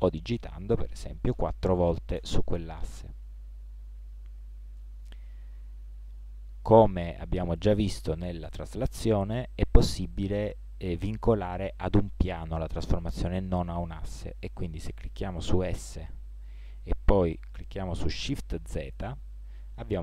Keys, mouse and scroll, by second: 3.7-15.8 middle drag, 15.8 s.